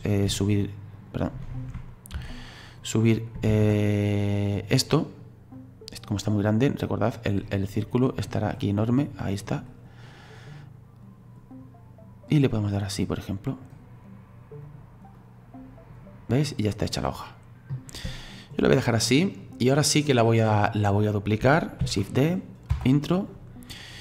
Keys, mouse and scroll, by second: 0.3 e, 2.2 ctrl+z, 2.8 click, 3.5 ctrl+z, 5.6-8.6 drag, 14.6 right click, 15.2-16.4 drag, 16.4 middle click, 17.3-18.2 scroll down 2, 18.2-19.4 shift+middle drag, 19.4-21.8 drag, 21.8 shift+d, 23.3-24.0 drag.